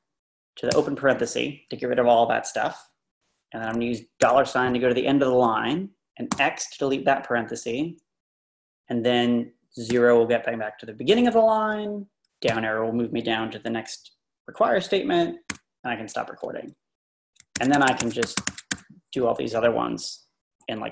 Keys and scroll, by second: 0.7 shift+9, 4.2 shift+4, 6.3 x, 9.9 0, 12.5 Page_Down, 15.5 q, 17.4-19.2 typing.